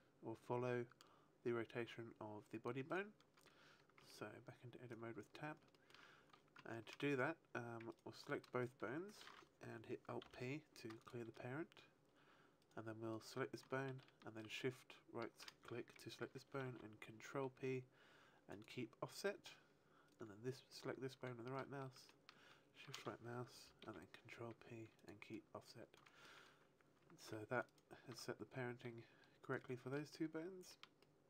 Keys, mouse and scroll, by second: 2.9 right click, 3.9 Tab, 4.8 right click, 5.7 shift+middle click, 7.8 ctrl+right click, 8.6 shift+right click, 10.2 alt+p, 12.5 right click, 13.1 right click, 14.3 shift+right click, 16.6 ctrl+p, 20.0 right click, 22.0 shift+right click, 23.8 ctrl+p, 27.1 ctrl+Tab, 27.1 a, 27.6 right click, 29.0 r, 29.4 right click, 30.0 shift+middle click, 30.9 shift+middle click.